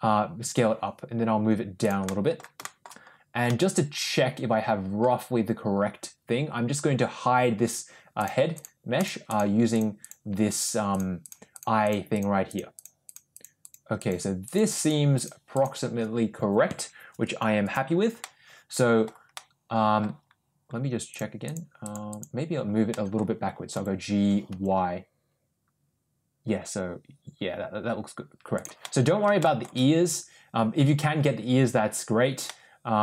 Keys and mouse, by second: 1.9 middle click, 2.5 shift+middle drag, 3.5-4.9 middle drag, 8.1 click, 8.4 click, 8.9 click, 9.2 click, 9.6 click, 9.9 click, 10.5 click, 10.8 click, 11.1 click, 11.4 click, 11.7 click, 12.0 click, 12.4 click, 12.7 click, 12.9 click, 13.2 click, 13.5 click, 13.9 click, 14.3 click, 14.6 click, 15.0 click, 15.4 click, 17.1 click, 17.5 click, 18.1 middle click, 19.2-19.9 middle drag, 21.0 click, 21.3 click, 21.7 click, 22.0 click, 22.8 middle click, 23.6 g, 28.7 middle click, 29.3 shift+middle click, 32.4 middle click.